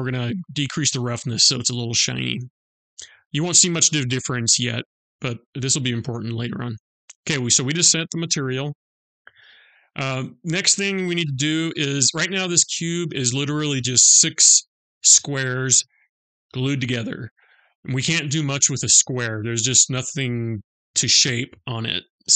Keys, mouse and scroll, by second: 4.8 click, 6.4 click, 9.4 click.